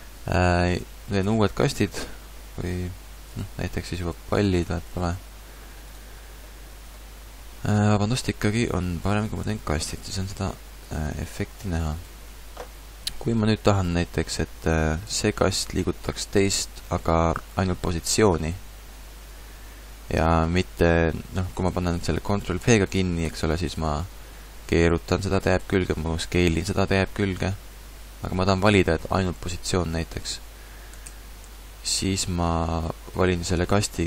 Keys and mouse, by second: 1.2 shift+a, 4.0 g, 4.7 click, 4.9 shift+d, 8.8 x, 9.6 shift+a, 11.6 g, 15.2 shift+d, 16.5-18.7 drag, 22.6 ctrl+p, 22.6 click, 24.0 r, 25.9 s, 29.2-31.0 middle drag, 31.0 ctrl+z, 31.4 ctrl+z, 32.4 a.